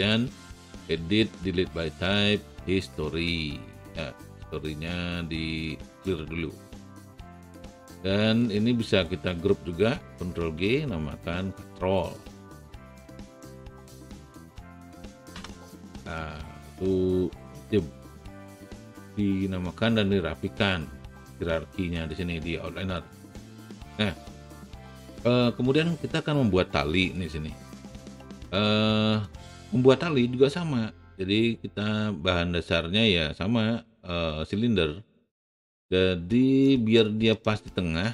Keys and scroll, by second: 10.5 ctrl+g, 13.5-14.8 typing, 15.3 Return.